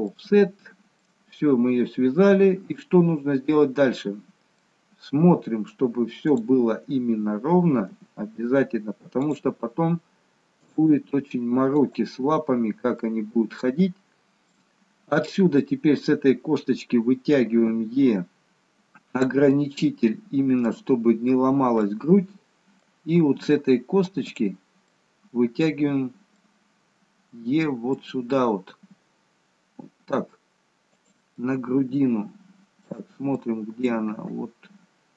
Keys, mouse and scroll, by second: 0.1 middle click, 1.6-2.4 scroll up 1, 2.4-3.1 scroll down 1, 4.5 middle click, 6.2 click, 7.9 g, 10.8 click, 11.0 g, 13.0 middle click, 15.2 click, 17.7 e, 19.6 middle click, 21.9 middle click, 23.2-24.3 scroll up 2, 24.3 click, 24.9 middle click, 26.5 middle click, 28.8 e, 31.5 middle click, 33.5 middle click, 34.2 e.